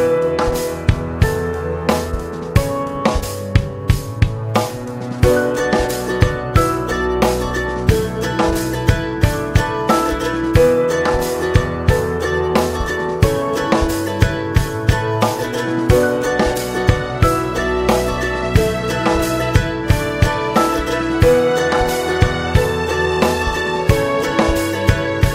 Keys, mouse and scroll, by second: 1.7-5.8 drag, 5.8 middle click, 6.6 click, 7.1-8.8 middle drag, 8.8-25.3 drag.